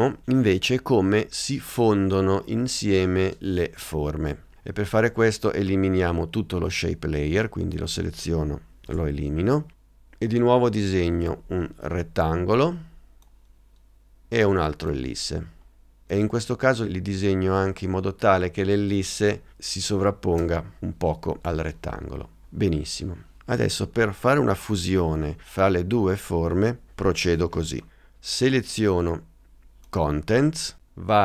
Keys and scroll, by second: 8.9 BackSpace, 19.9 space.